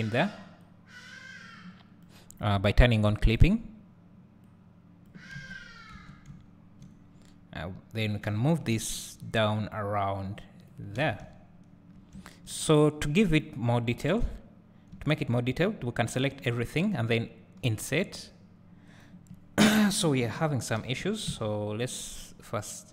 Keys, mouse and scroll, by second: 0.7-3.4 drag, 4.5-11.1 drag, 6.0 Tab, 6.5 `, 7.3-8.3 scroll up 2, 8.3 g, 11.1 alt+a, 11.2 `, 13.5 click, 14.0 Tab, 14.4-14.9 scroll up 1, 14.9 `, 16.5 a, 17.7 i, 19.0 right click, 20.8 ctrl+z.